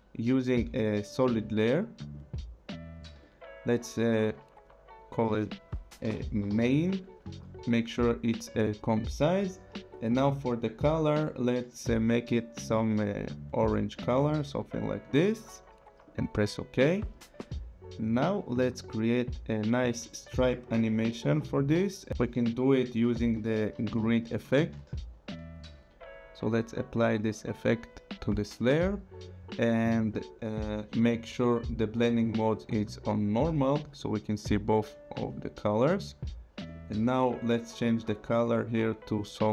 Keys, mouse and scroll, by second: 2.1 click, 5.7-7.0 typing, 8.8 click, 9.9 click, 12.3 click, 15.1 click, 18.2 click, 20.0 click, 22.1 BackSpace, 23.3-24.9 typing, 26.5 click, 31.8 click, 33.2 click, 36.7 click, 38.2 click.